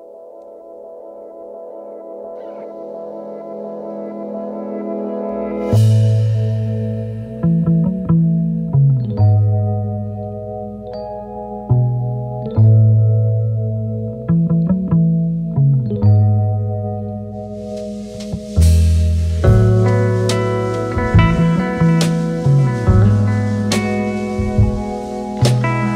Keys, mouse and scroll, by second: 5.4-5.7 alt+scroll up 2, 5.9-7.2 space, 8.4 space, 12.2 x, 18.4 double click, 25.4 8.